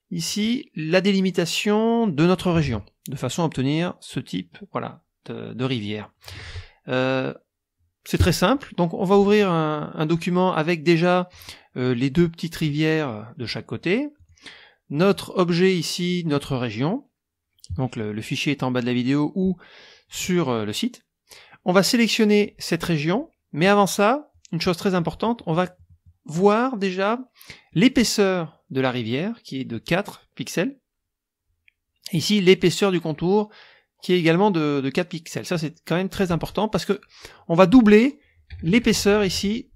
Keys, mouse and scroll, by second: 0.1 click, 2.7 ctrl+Tab, 6.4 ctrl+Tab, 11.3 click, 12.6 click, 14.1 click, 15.0 click, 22.4-23.0 drag, 23.8-24.5 drag, 24.8 click, 27.7 click, 32.1 click, 38.6 KP_Subtract.